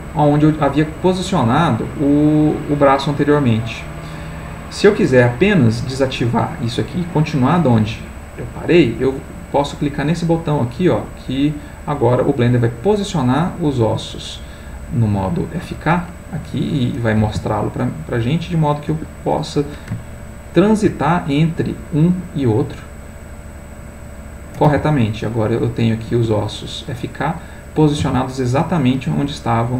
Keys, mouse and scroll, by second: 10.8 click, 16.5 click, 17.2 r, 18.9 Escape, 20.0 ctrl+middle click, 22.7 click, 23.9 click, 24.6 r, 26.1 Escape, 27.2 click, 29.1 Escape.